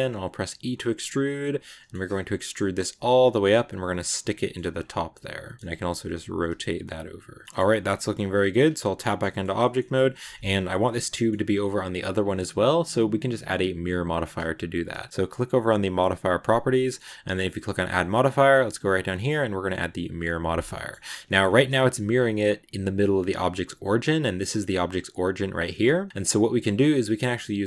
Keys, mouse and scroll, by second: 0.3 e, 1.3 middle click, 1.8 g, 2.4 middle click, 2.7 r, 3.9 middle click, 4.5 g, 5.4 right click, 5.6 r, 6.7 middle click, 7.4 scroll down 1, 7.5 a, 7.6 middle click, 8.5 Tab, 8.9 shift+middle click, 9.3 scroll up 2, 9.5 middle click, 9.9 scroll up 1, 10.0-15.4 middle drag, 15.4 click, 16.2-20.4 drag, 20.4 scroll down 2, 20.6 middle click, 20.8-21.4 scroll up 4, 21.1 shift+middle click, 21.8 g, 23.4 g, 25.3 scroll down 2, 25.7 g, 26.5-27.6 middle drag.